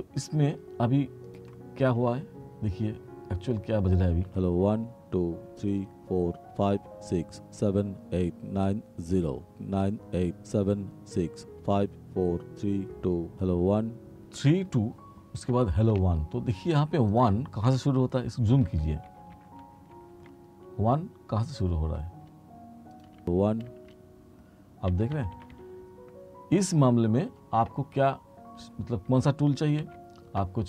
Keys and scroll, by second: 4.3 space, 14.4 space, 18.7 t, 23.3 space, 25.0 r, 29.9 t.